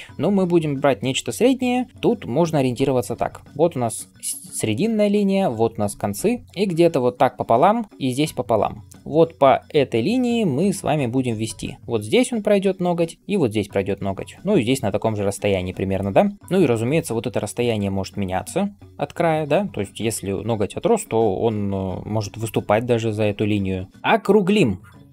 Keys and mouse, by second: 3.0-8.8 d, 15.8 d, 23.9 n, 23.9 ].